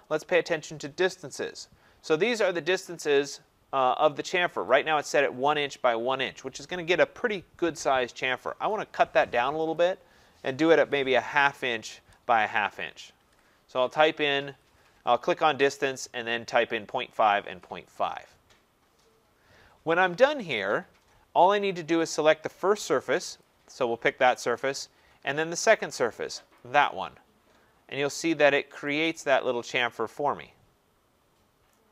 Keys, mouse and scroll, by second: 9.7 click, 10.6-11.7 typing, 12.8-14.5 typing, 23.4 click, 26.6 click, 27.6-28.3 scroll, 28.3 scroll, 31.7 right click.